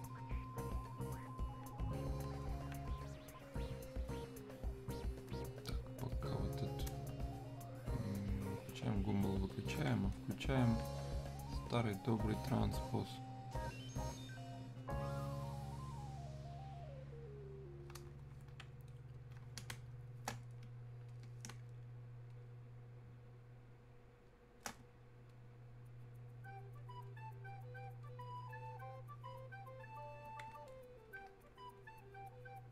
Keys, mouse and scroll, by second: 14.7-18.9 drag, 19.7 space, 21.1 click, 21.6 space, 22.4 click, 22.5 space, 25.3-28.6 drag, 31.8-32.7 drag.